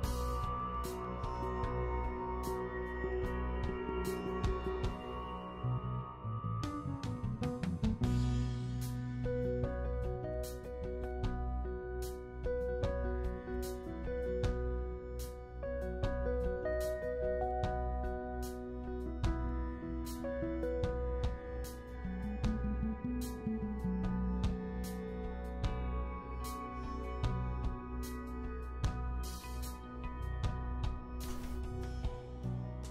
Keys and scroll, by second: 31.0 s, 32.4 s.